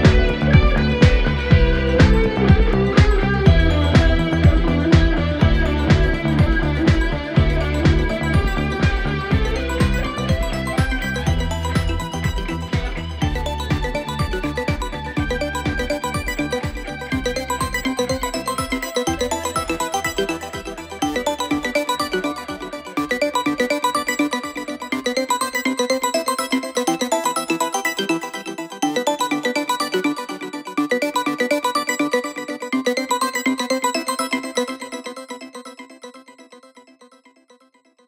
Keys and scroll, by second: 9.2 4, 11.4 3, 12.7 4, 16.7 3, 20.4 ], 24.7 ctrl+z, 31.0 Delete, 31.8 4.